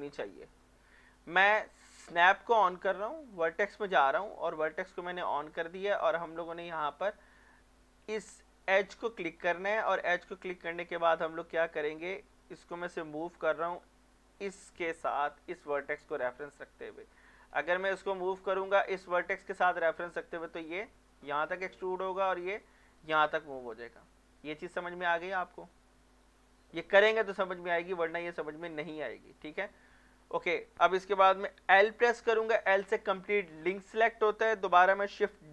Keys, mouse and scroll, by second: 2.1 click, 6.0-8.1 middle drag, 8.0 Tab, 9.3-14.9 drag, 14.9 middle click, 15.6 scroll up 1, 16.4 scroll down 1, 16.5 middle click, 17.5-18.4 scroll down 1, 18.4-23.3 drag, 23.3 scroll down 1, 23.6-26.3 middle drag, 27.4 scroll down 1, 28.0 scroll up 1, 28.7-29.1 scroll down 1, 29.1 middle click, 29.5 scroll up 1, 29.9 middle click, 31.8 l, 32.5 middle click, 32.8 Tab, 34.5 middle click.